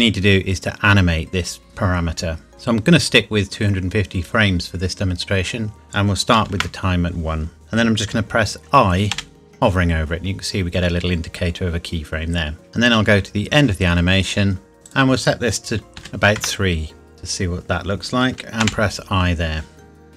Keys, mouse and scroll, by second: 2.5 click, 5.8 click, 6.4 KP_1, 6.5 KP_Enter, 9.1 i, 12.7 click, 14.9 click, 16.0 KP_3, 16.4 KP_Enter, 18.6 i.